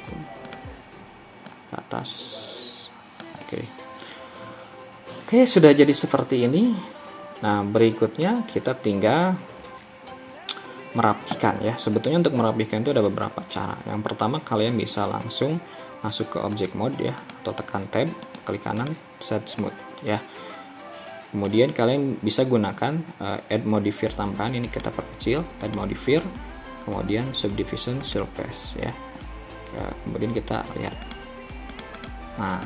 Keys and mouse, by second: 3.4-8.3 middle drag, 8.6 KP_1, 10.2 KP_3, 19.0 click, 19.7-21.6 middle drag.